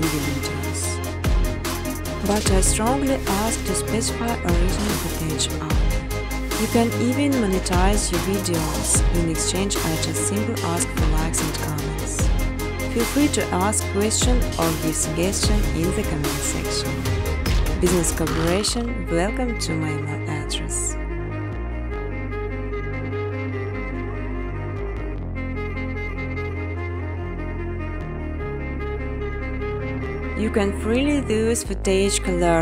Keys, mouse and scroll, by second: 0.7-9.6 typing, 3.8 Tab, 10.3 click, 10.7-12.0 typing, 13.3 click, 13.6 click, 16.1 click, 16.5-17.5 typing, 17.5 click, 19.8 click, 20.0 click, 22.3 click, 23.2-24.7 typing, 24.1 click, 27.2 space, 28.4 shift+click, 28.7 right click, 29.5 click, 30.6 1, 31.6 click.